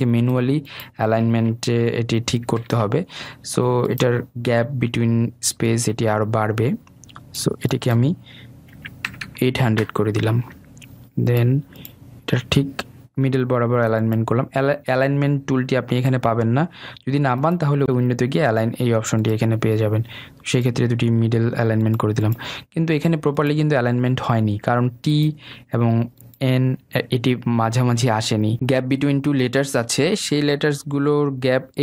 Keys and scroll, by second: 2.4 ctrl+z, 10.8 Return.